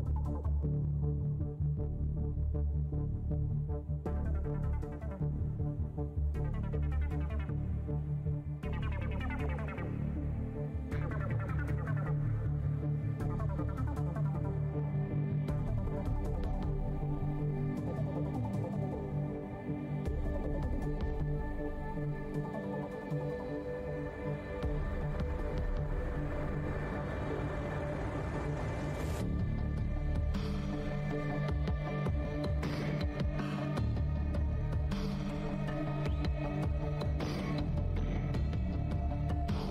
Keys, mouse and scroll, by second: 0.0 alt+w, 1.7 alt+w, 1.7-2.7 alt+scroll up 2, 2.2 alt+w, 2.9 shift+d, 4.1 r, 6.8 shift+scroll down 1, 10.2 click, 11.3-12.0 typing, 13.7 z, 16.0 click, 16.2-17.5 typing, 17.5 Return, 20.5 click, 21.0-23.5 typing, 21.8 Tab, 23.5 Return, 24.6 shift+Tab, 24.8 KP_5, 25.3 Tab, 25.5 KP_1, 25.6 KP_0, 25.8 Return, 27.3 click, 28.0 Return, 28.0 `, 28.3 v, 28.9 w, 30.4 r, 30.4-30.7 scroll down 1, 32.5 scroll down 1, 32.5-35.2 typing, 33.0 alt+scroll, 35.8 click, 36.6 shift+s, 36.8 shift+s, 37.5 scroll down 1, 37.9 alt+shift+click, 39.2 alt+click.